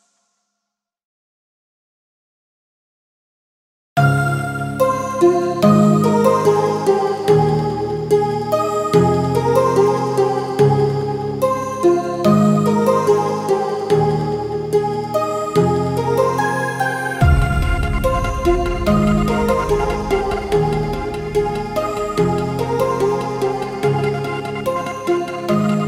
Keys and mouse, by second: 3.1 ctrl+alt+shift+e, 10.4-18.4 drag, 18.4 ctrl+t, 19.6-24.2 drag, 24.2 Return, 25.5 ctrl+s.